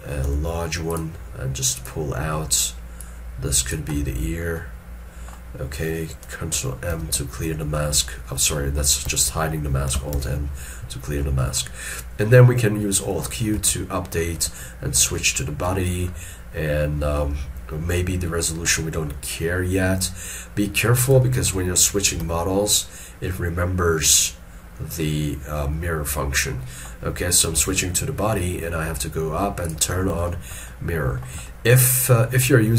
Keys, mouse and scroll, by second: 4.1 middle click, 7.0 ctrl+m, 9.2 ctrl+m, 10.2 alt+m, 11.3 middle click, 13.7 alt+q, 14.7 shift+middle click, 15.3 middle click, 15.9 shift+middle click, 18.9 middle click, 26.7 middle click, 27.7 alt+q, 30.4 shift+middle click, 30.8 shift+middle click, 31.6 shift+middle click.